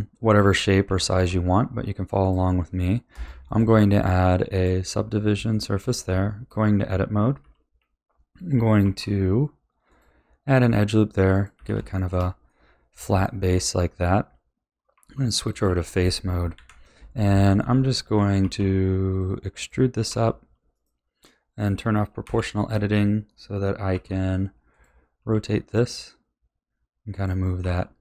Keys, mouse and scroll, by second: 0.8 g, 3.1 click, 3.4-5.5 drag, 5.5-6.1 shift+middle drag, 6.1 Tab, 6.8-7.2 scroll up 3, 7.4 a, 8.8 ctrl+r, 11.5 a, 11.9-14.9 shift+middle drag, 14.9 3, 15.5 click, 16.5 KP_1, 17.6 shift+middle click, 18.4 e, 20.0 r, 22.2 o, 23.9 r, 25.1 g, 27.6 r.